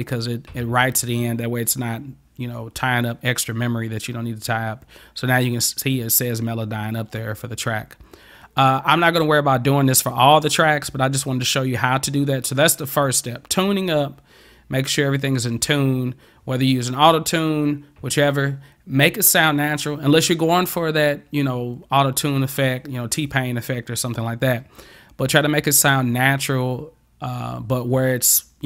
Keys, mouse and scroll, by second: 9.1 click.